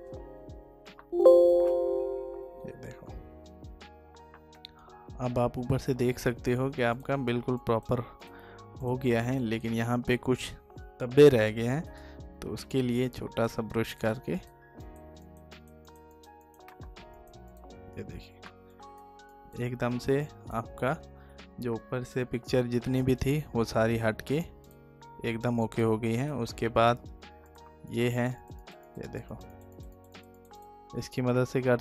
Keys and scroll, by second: 3.6 ctrl+d.